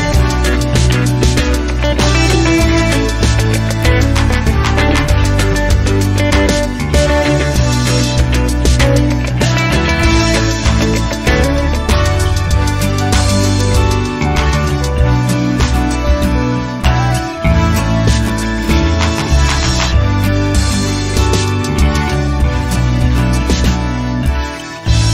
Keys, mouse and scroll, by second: 0.5 click, 2.1 BackSpace, 3.7 click, 5.2 click, 8.5 click, 9.0 click, 10.3 BackSpace, 11.7 click, 13.9-14.8 scroll down 2, 16.9 click, 18.5 KP_1, 18.8 KP_0, 20.4 click, 21.6 KP_Subtract, 22.0 KP_5, 22.2 KP_0, 24.2 click.